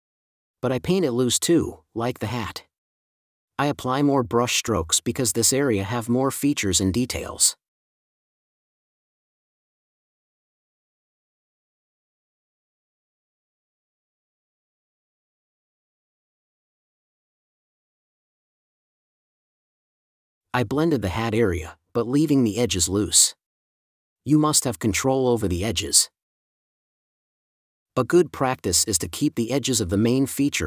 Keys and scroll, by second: 14.5 5, 18.4 4, 20.7 space, 22.1 space, 25.7 5, 26.7 super+z.